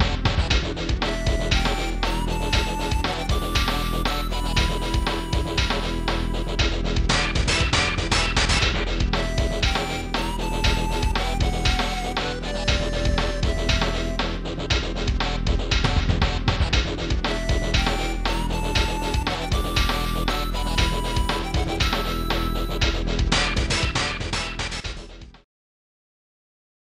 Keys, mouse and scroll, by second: 4.0-5.0 typing, 6.0 scroll up 1, 7.3 scroll up 1, 7.7 right click, 8.5 right click, 8.9 right click, 9.8 middle click, 11.0 right click, 14.7-16.3 typing, 17.5 right click, 18.5 right click, 20.1-21.1 typing, 22.4 ctrl+s, 22.7 click, 23.2 scroll up 1.